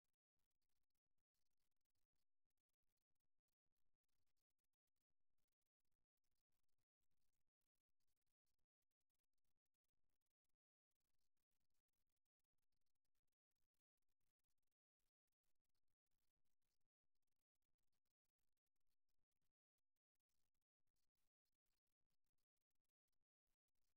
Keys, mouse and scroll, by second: 2.8-6.2 drag, 8.5-13.1 middle drag, 16.8-18.8 drag, 20.3 middle click, 23.8-23.9 middle drag.